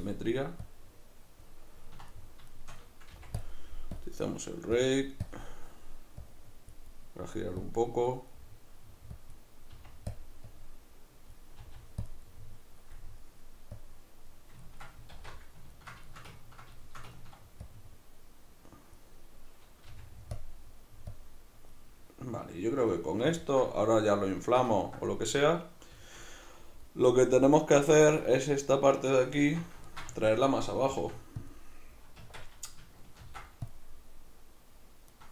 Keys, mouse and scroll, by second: 1.8-3.4 ctrl+middle drag, 3.1 f, 3.4 click, 6.9 middle click, 7.6 click, 8.3 middle click, 9.1-10.2 drag, 9.7 f, 11.6 click, 11.6 f, 12.3-13.7 middle drag, 13.7 click, 14.6-17.7 ctrl+middle drag, 15.1 alt+q, 17.7-20.4 drag, 19.9 f, 22.9-31.5 middle drag, 29.5 alt+q, 31.0 f, 31.5 click, 32.2 Tab, 33.2 ctrl+r.